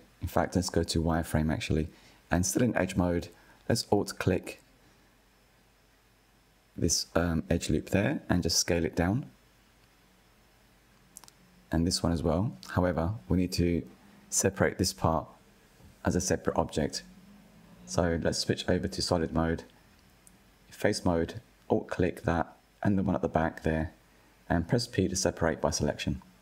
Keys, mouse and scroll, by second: 1.2-3.8 drag, 5.4 s, 10.3 alt+click, 11.3 s, 16.1 3, 16.9-18.3 middle drag, 18.3 click, 18.6-20.0 middle drag, 20.0 alt+click, 20.6 middle click, 21.5 shift+click, 23.1 p.